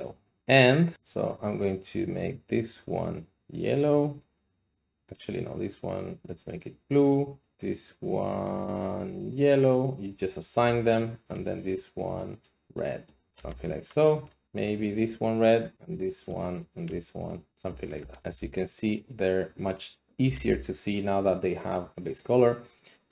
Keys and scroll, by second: 13.4 a, 18.0 a, 18.2 a, 18.3 a, 20.2 a, 20.4 a.